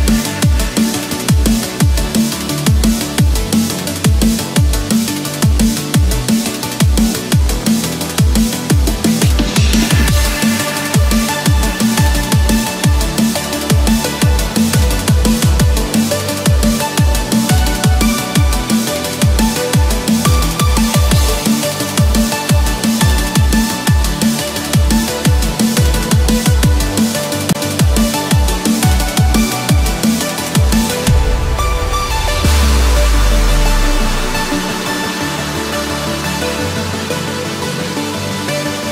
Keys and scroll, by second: 12.5 ctrl+z, 24.3 ctrl+-, 33.5 ctrl+-, 34.3 ctrl+0, 35.4 ctrl+=, 35.7 ctrl+space, 36.0 ctrl+=.